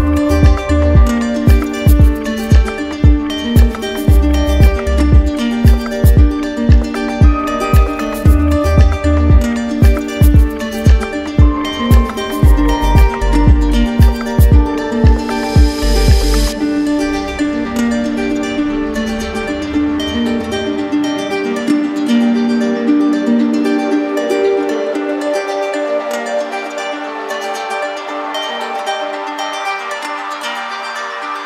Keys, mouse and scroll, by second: 2.5 click, 2.9 click, 7.8 click, 11.8 click, 13.2 click, 14.7 click, 15.3 alt+click, 16.3 alt+click, 26.4 click, 27.3 alt+click, 30.7 click.